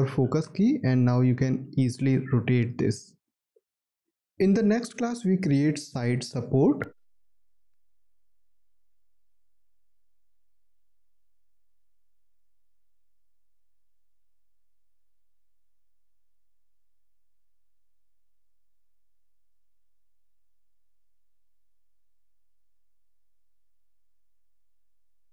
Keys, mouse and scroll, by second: 0.7 alt+click.